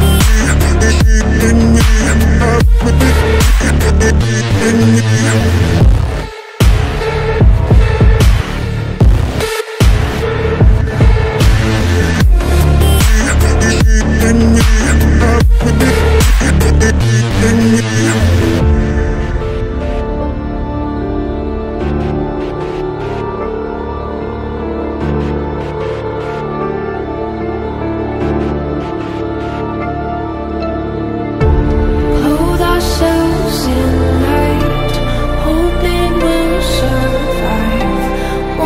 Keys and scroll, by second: 23.2 ctrl+Page_Down, 36.2 5, 36.5 Return.